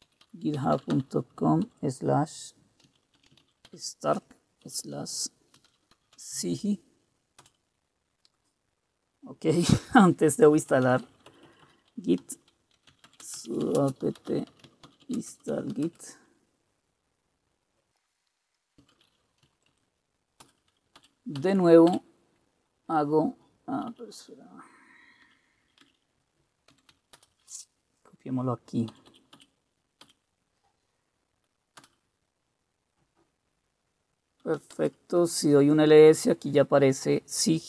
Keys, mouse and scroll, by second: 0.0-8.0 typing, 10.7-16.3 typing, 17.9 Return, 18.8-20.3 typing, 20.5 Return, 21.1 Up, 21.5 Up, 22.0 Up, 24.0 Down, 25.3 Down, 25.8 Down, 25.9 Down, 26.6-27.3 typing, 29.0 Up, 29.2 Up, 29.5 Up, 30.1 Up, 31.9 Return, 34.4-35.2 typing.